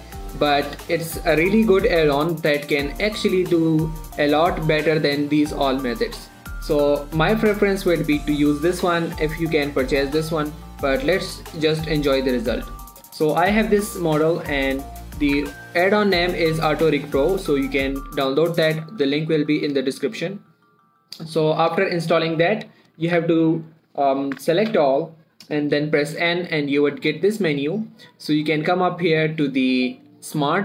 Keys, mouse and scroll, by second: 7.2 scroll up 1, 7.5-9.4 scroll down 1, 13.4 click, 13.7 middle click, 14.1 click, 14.8 middle click, 21.4 middle click, 21.6 scroll up 1, 21.9 click, 23.5 a, 24.1 click, 25.1 a, 26.6 typing, 27.7 click.